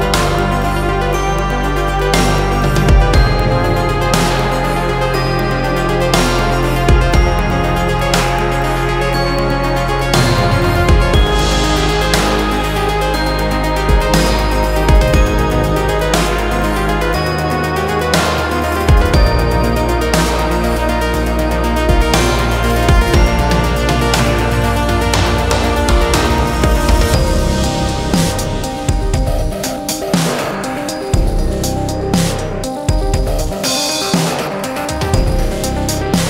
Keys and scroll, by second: 2.4 F3, 5.6 ctrl+z, 6.3 F3, 6.4 Escape, 9.8 F2, 13.0 Delete, 13.7 space, 13.8 F4, 18.4 F2, 29.8 space, 34.0 ctrl+Page_Down.